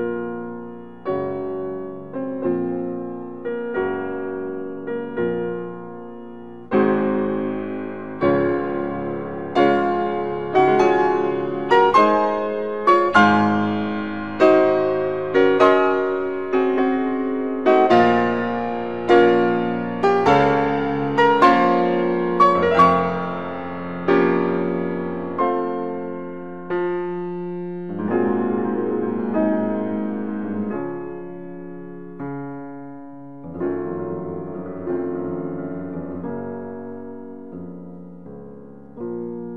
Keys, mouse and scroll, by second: 5.0 click, 7.9 right click, 8.0 right click, 14.3 s, 15.3 y, 29.1 y, 30.4-36.2 middle drag, 36.2 click.